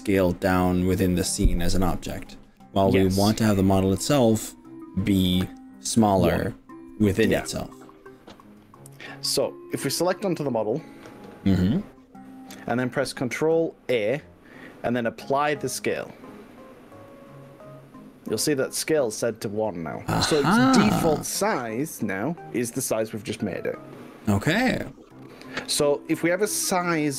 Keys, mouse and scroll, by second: 14.1 click, 15.7 ctrl+a, 20.5 click, 24.0-27.1 middle drag.